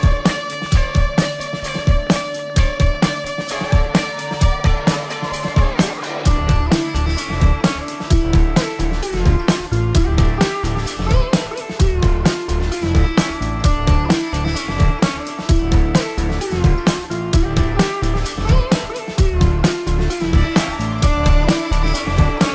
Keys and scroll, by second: 0.9 ctrl+=, 1.6 space, 3.1 ctrl+-, 3.3 space, 5.8 space, 6.5 space, 8.1 space, 10.7 space, 12.1 space, 14.0 space, 15.1 space, 15.9 space, 17.4 space, 18.3 ctrl+-, 19.3 space, 21.9 space.